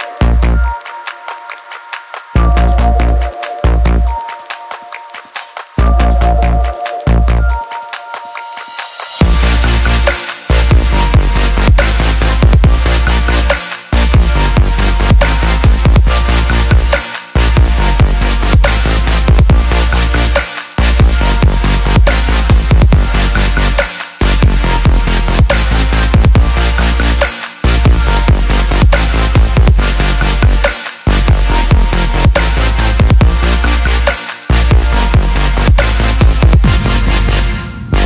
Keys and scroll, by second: 0.9 ctrl+j.